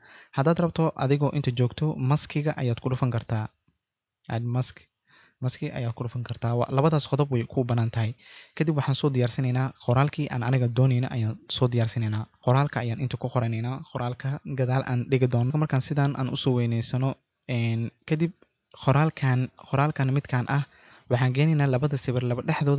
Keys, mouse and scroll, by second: 1.2 ctrl+z, 4.0 click, 5.4 click, 12.0 t, 12.5 click, 13.1 typing, 13.6 click, 14.1 shift+click, 15.9-19.8 drag, 19.9 click.